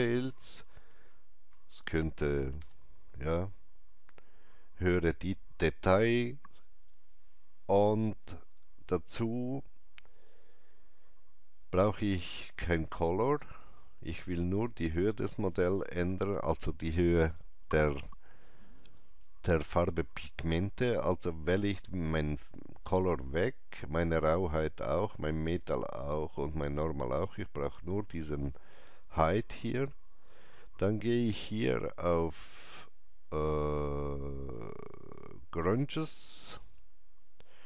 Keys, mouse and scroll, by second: 0.0-2.1 typing, 2.6 Return, 21.5 Return, 21.5 click, 21.5 typing, 23.9 click, 25.4 click, 34.4 click, 34.4 scroll up 1, 36.6 click.